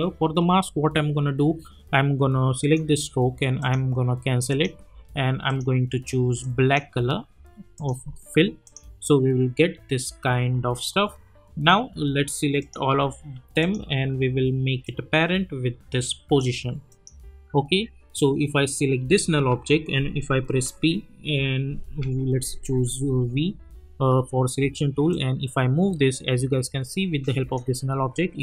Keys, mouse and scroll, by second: 2.6-7.0 drag, 12.6 click, 13.6 shift+click, 15.1-16.4 drag, 19.5 p, 22.0 v, 25.1-27.6 drag.